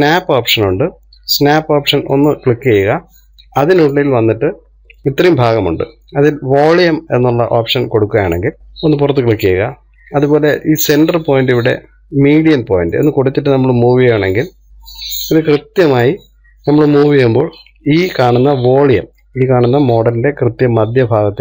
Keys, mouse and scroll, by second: 14.7 click, 15.2 click, 17.3-21.4 middle drag.